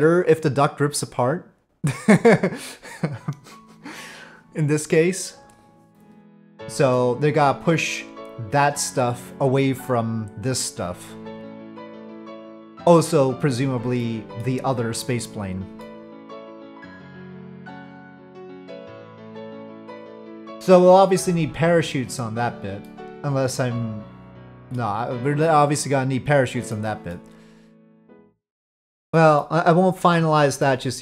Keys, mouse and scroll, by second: 6.6-7.0 middle drag, 14.0-14.4 middle drag, 15.8-16.3 middle drag, 22.8-24.7 middle drag, 26.8 middle click, 28.0-29.4 middle drag, 30.6 middle drag.